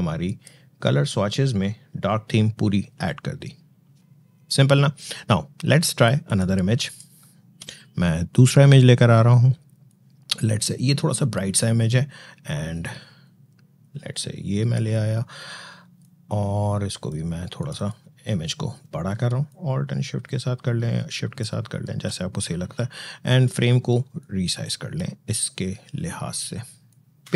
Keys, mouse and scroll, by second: 6.1 click, 7.4 Delete, 9.7-18.9 drag, 19.3-27.3 shift+drag.